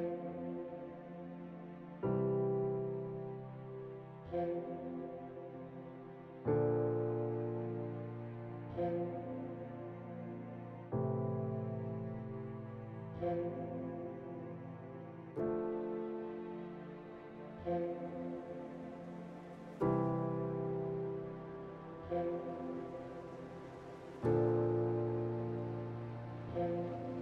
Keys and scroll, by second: 11.2 f, 11.6 F3, 12.8 F4, 15.4 F3, 16.8 q, 16.9 F3, 18.0 F3.